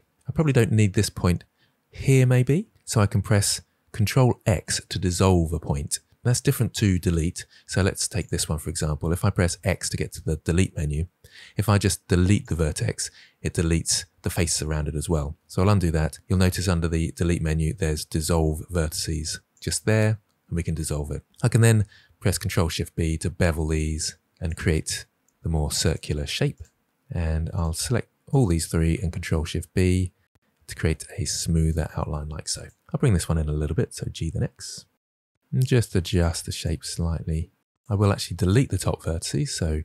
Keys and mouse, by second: 4.3 ctrl+x, 9.4 x, 15.1 ctrl+z, 16.7 x, 21.5 ctrl+b, 24.4 click, 24.5 g, 24.9 click, 25.6 g, 26.1 click, 26.6 click, 26.8 g, 29.8 ctrl+b, 33.1-36.1 typing, 33.8 drag, 34.3 click, 34.6 drag, 35.1 click, 35.3 drag, 35.5 click, 36.0 click, 36.2 click, 38.8 x.